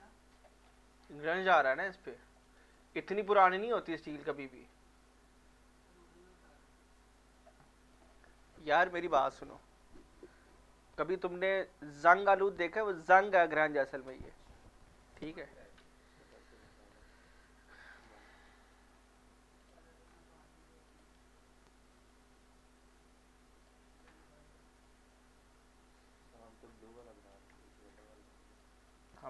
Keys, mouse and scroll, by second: 0.6 scroll down 1, 1.0 scroll up 1, 2.0 alt+click, 2.4 alt+right click, 2.7-5.2 alt+drag, 5.2-7.7 drag, 17.5 alt+click, 17.8 alt+right click, 19.6 click, 20.1-20.9 scroll down 1, 20.9 click, 24.8-28.6 drag.